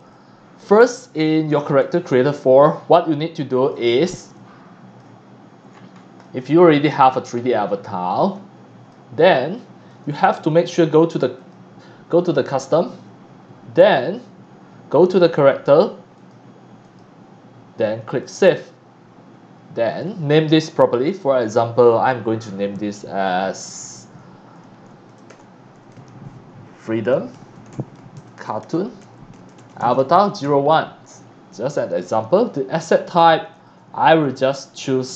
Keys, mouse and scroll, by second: 2.7 c, 2.7 click, 4.3 click, 5.2 click, 5.4 scroll down 1, 5.7 scroll up 1, 5.9 scroll down 1, 6.1 x, 6.2 click, 6.4 c, 7.3-7.8 scroll up 2, 8.0 x, 8.0 click, 8.3 c, 9.9 click, 10.3 click, 11.3 click, 16.1 click, 16.8 click, 18.2 click, 19.9 click, 20.7 click, 24.9-30.9 typing, 33.5 click.